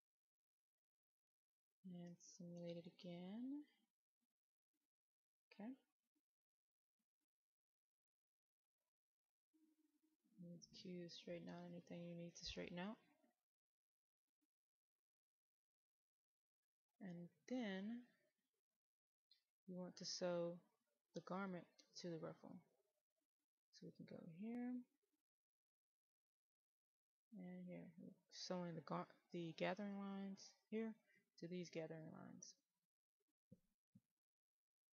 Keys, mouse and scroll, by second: 2.3 click, 9.2 q, 9.8 q, 10.0 click, 10.4-14.5 drag, 14.9-15.7 scroll down 1, 18.1 middle click, 22.8-34.9 drag.